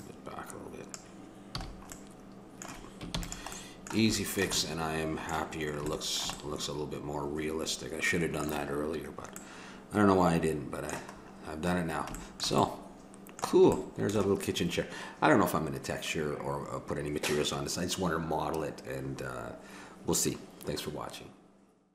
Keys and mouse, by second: 1.5 a, 3.1 ctrl+s, 10.4-18.5 middle drag.